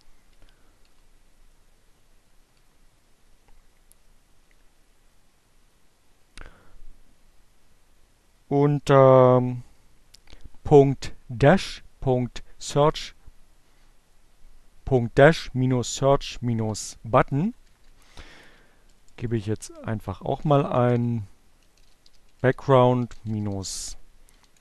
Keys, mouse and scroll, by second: 0.0 Page_Down, 2.3 Page_Down, 15.0 Down, 16.5 Return, 17.1 Up, 17.5 space, 18.1 a, 19.3-24.6 typing.